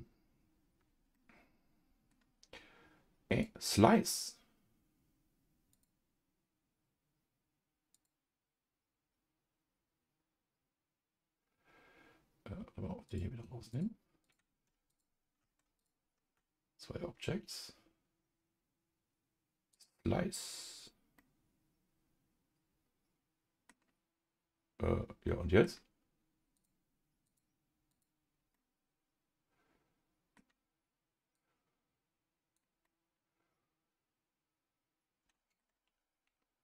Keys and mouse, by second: 1.1 middle click, 3.3 click, 5.7-8.2 drag, 13.1 click, 14.2 click, 14.9 ctrl+click, 15.8 shift+click, 19.7 click, 21.2-23.7 middle drag, 25.2 middle click, 26.5 click, 27.2 click, 27.9 click, 28.5-30.3 middle drag, 31.3-32.8 drag, 32.8-35.6 middle drag, 35.8 ctrl+z, 36.2 ctrl+z.